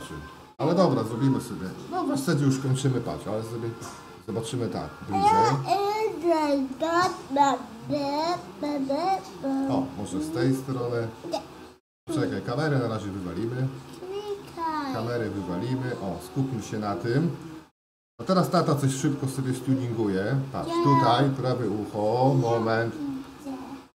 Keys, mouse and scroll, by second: 3.3-15.2 middle drag, 15.2 x.